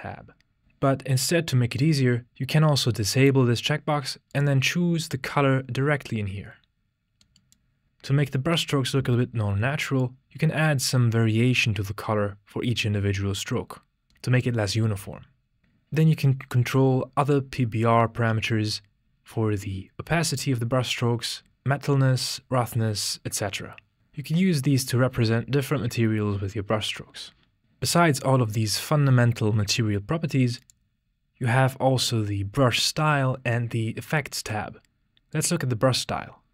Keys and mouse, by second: 4.3 click, 10.4-15.6 drag, 21.8-24.7 drag, 30.6 click, 35.3 click.